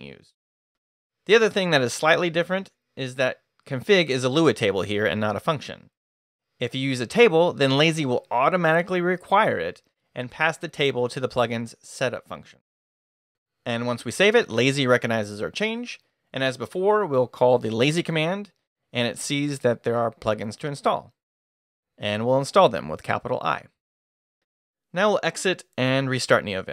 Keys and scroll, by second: 13.3 shift+Escape, 13.4 shift+;, 13.9 shift+w, 14.0 Return, 15.7 Return, 15.8-17.3 typing, 21.9 shift+i, 24.6 q.